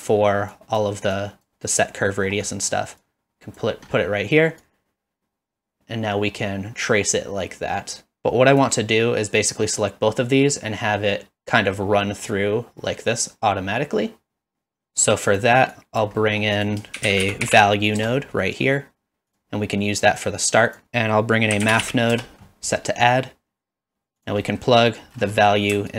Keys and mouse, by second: 0.5 click, 1.2 click, 2.6 middle click, 3.0 click, 4.6-8.8 drag, 9.4-14.9 drag, 15.1 click, 15.8 click, 16.6 click, 16.9 shift+a, 20.3 click, 20.8 shift+a, 24.5 middle click.